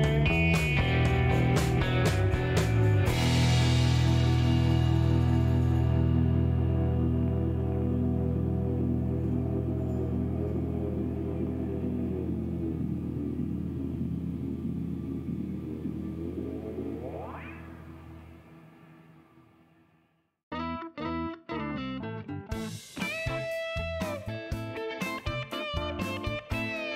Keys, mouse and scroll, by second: 1.4 click, 3.4 scroll up 1, 4.2 scroll up 1, 6.0 click, 6.9 middle click, 7.4 shift+right click, 10.0 shift+middle click, 10.6 shift+right click, 11.4 shift+click, 15.0 click, 16.1 middle drag, 16.5 scroll up 1, 16.9-17.6 middle drag, 17.8 scroll down 1, 18.1-18.9 middle drag, 22.0 click, 24.1 click, 25.2 click, 26.3 click.